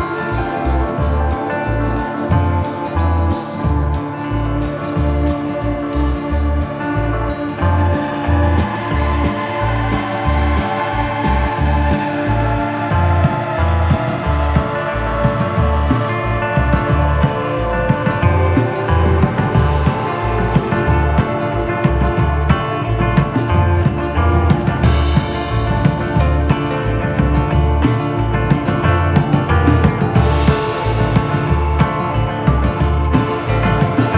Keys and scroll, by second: 10.2 Delete, 22.5 F3, 23.3 Escape.